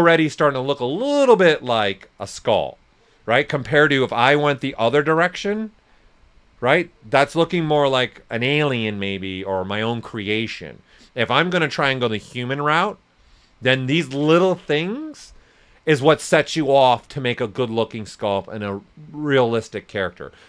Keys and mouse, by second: 2.7 alt+right click, 3.2 ctrl+z, 4.6-9.8 alt+drag.